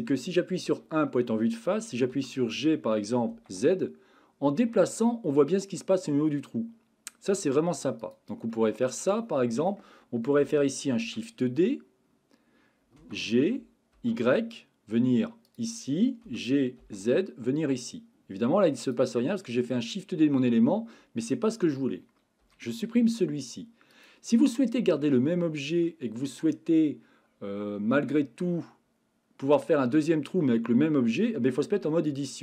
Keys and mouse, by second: 0.6 KP_1, 2.1 g, 3.3 z, 8.0 click, 8.5-9.7 middle drag, 11.0 shift+d, 13.0 g, 14.1 y, 16.2 g, 16.8 z, 19.2-19.7 middle drag, 22.4 Delete, 23.9 click, 24.5-25.0 middle drag, 31.8 Tab.